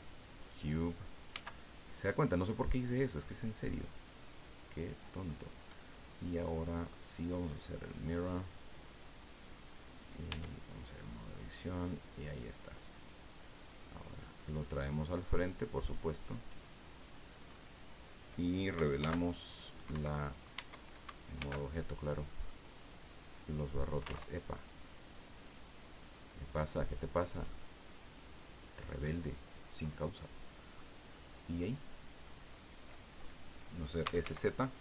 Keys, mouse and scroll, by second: 0.3 click, 1.3 s, 4.9 click, 6.5 click, 8.2 click, 10.3 Tab, 10.8-12.4 drag, 13.1-14.3 drag, 14.6 middle click, 15.9-17.5 drag, 17.5 middle click, 19.0 alt+h, 19.9 Escape, 21.0 alt+Tab, 21.4 alt+h, 22.3 click, 23.2 click, 24.1 ctrl+z, 24.9 right click, 25.9-27.5 drag, 27.5-29.0 middle drag, 29.1-29.6 scroll up 1, 31.1-32.4 middle drag, 33.8-34.7 typing.